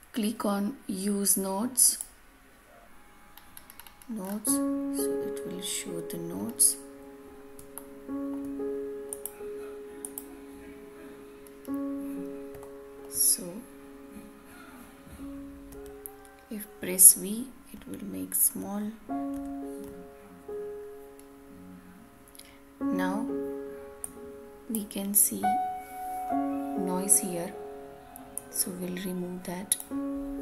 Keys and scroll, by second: 19.3 ctrl+alt+v.